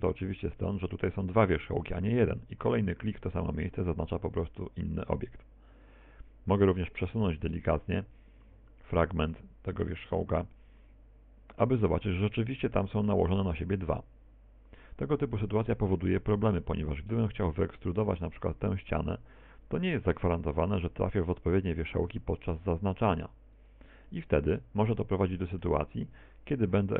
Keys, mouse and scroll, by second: 10.1 right click, 10.7 right click, 11.1 right click, 13.6 g, 22.7 middle click, 24.1 right click, 25.3 shift+right click.